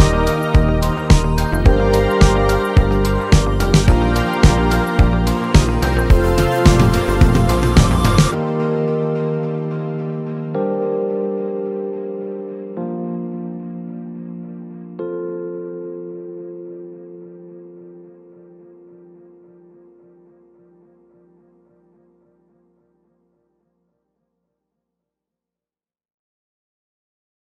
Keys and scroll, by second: 24.3 z, 25.3 space.